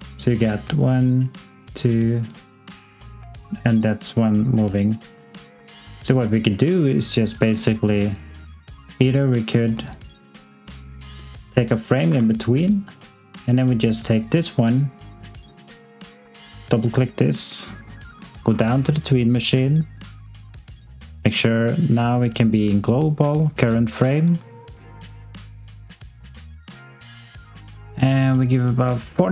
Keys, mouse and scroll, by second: 12.0 f, 13.3 click, 17.5-18.6 scroll down 1, 25.3 click.